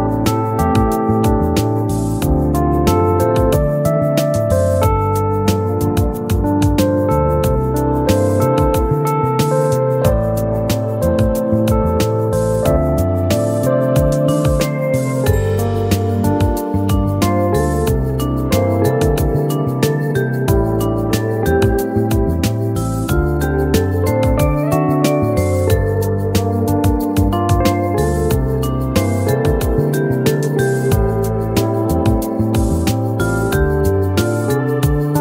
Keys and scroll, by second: 5.0 ctrl+c, 7.7 ctrl+f.